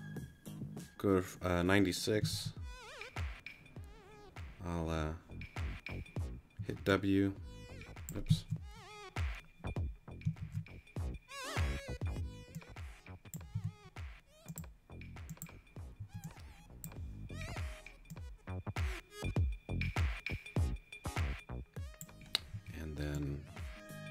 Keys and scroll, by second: 2.3 super+a, 6.6 w, 10.4 super+z, 13.5 t, 16.0 w, 22.5 w.